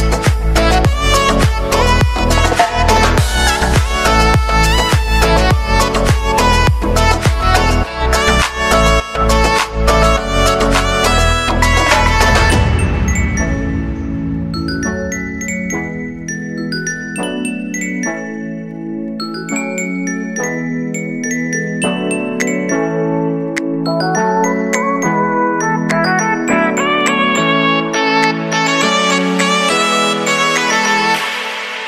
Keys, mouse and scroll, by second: 4.6 space, 9.9 space, 12.2 click, 12.5 -, 13.3 click, 18.0 click, 21.4 ctrl+c, 22.1 click, 23.4 ctrl+v, 24.7-29.2 drag, 29.2 space, 31.3 space.